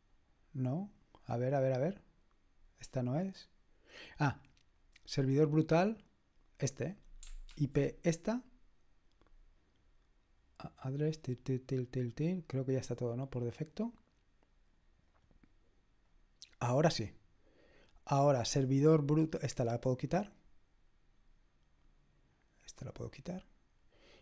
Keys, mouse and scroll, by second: 0.8 click, 1.8 click, 4.8 click, 6.9 click, 7.5 ctrl+v, 15.1 click, 21.8 click, 22.9 click.